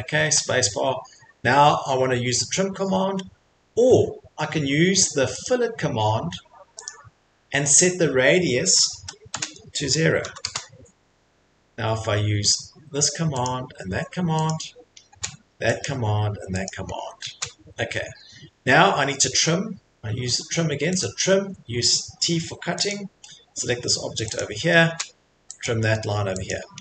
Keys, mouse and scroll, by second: 6.4 click, 8.9 typing, 10.2 typing, 10.4 Return, 13.4 click, 14.5 click, 15.8 click, 16.7 click, 16.9 middle click, 17.0 middle click, 18.1 middle click, 18.2 middle click, 18.5 Escape, 21.0 click, 22.9 click, 24.9 click, 25.6 click, 26.5 click.